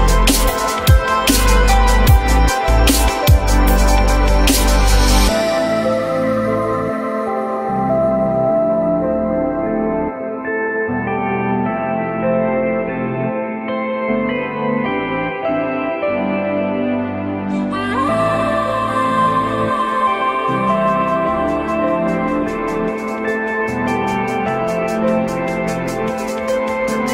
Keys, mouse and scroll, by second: 0.2 u, 1.6 shift+click, 17.7 F4, 18.5 alt+middle click, 19.6 alt+middle click, 20.9 alt+scroll up 1, 21.1 F4.